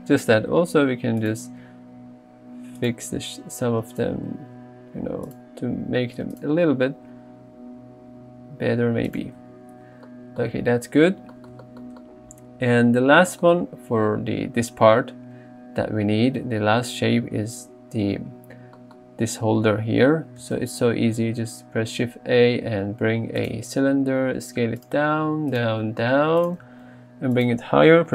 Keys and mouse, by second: 2.0 r, 2.8 click, 4.0 alt+click, 4.6 r, 5.3 click, 7.1 g, 9.1 click, 9.4 Tab, 10.1 middle click, 10.6 alt+z, 20.6 shift+a, 24.3-26.9 typing.